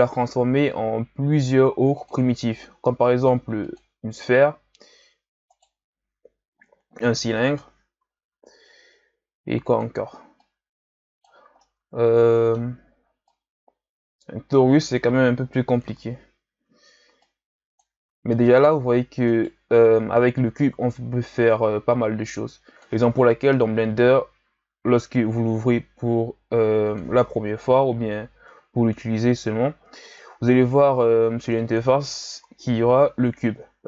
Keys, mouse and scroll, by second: 5.5 right click, 6.7 l, 8.3 s, 10.4-11.6 drag, 11.6-13.3 middle drag, 13.3-15.4 drag, 15.4 KP_1, 17.2 click, 18.1 s, 20.6-23.5 drag, 23.5 KP_7, 24.9 s, 27.6 KP_1, 29.0-30.2 shift+scroll up 5, 30.2-32.3 drag, 32.3 KP_7.